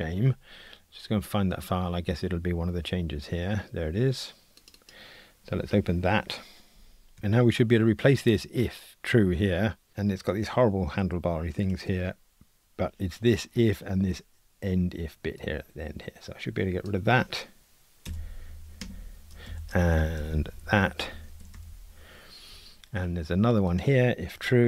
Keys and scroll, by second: 7.2 shift+super+F12, 20.2 alt+shift+Right, 21.6 Delete.